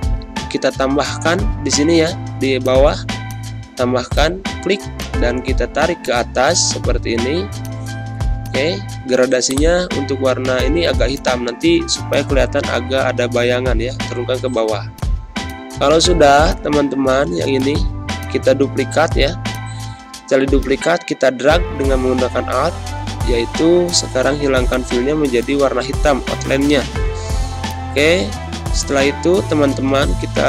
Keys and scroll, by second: 0.0 ctrl+Scroll_Lock, 1.8 =, 12.7 ctrl+[, 14.6 z, 15.5 space, 23.1 d, 24.4 z, 25.1 space.